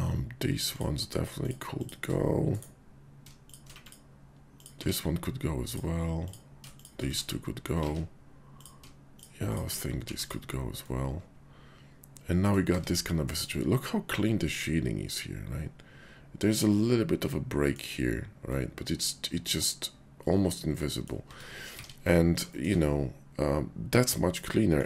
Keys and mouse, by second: 0.6 click, 1.2 shift+click, 1.8 shift+click, 2.6 click, 3.4 shift+click, 3.7 click, 4.5 click, 4.8 x, 5.7 click, 6.2 click, 7.7 ctrl+x, 7.9 ctrl+z, 9.4 shift+click, 9.9 x, 10.8 click, 12.3 click, 12.7 Tab, 13.4 click, 13.5-17.8 middle drag, 18.5-21.1 middle drag, 21.2 Tab, 21.7 alt+x, 22.4 shift+click, 24.3 click.